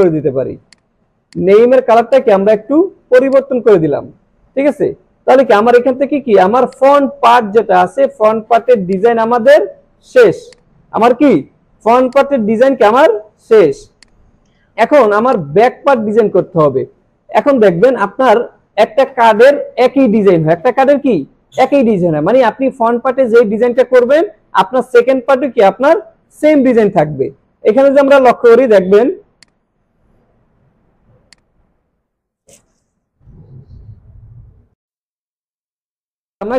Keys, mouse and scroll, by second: 1.7 alt+scroll down 1, 1.9 space, 2.1-2.7 click, 2.5 space, 2.7 alt+scroll down 1, 3.0 space, 3.3 click, 3.5 space, 6.2 space, 6.4 alt+scroll down 1, 6.7-8.0 click, 7.2 space, 7.8 space, 8.9-9.5 drag, 10.5-13.7 drag, 15.1 space, 15.4-15.9 click, 15.7 space, 28.0 click, 30.3 scroll down 1, 30.8 scroll up 1, 31.3 click, 33.7 click, 34.8 click.